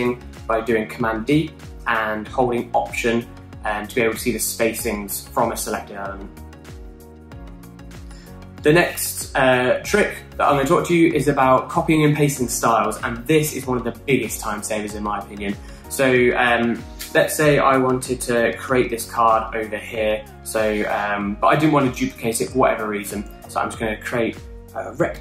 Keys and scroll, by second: 24.3 r.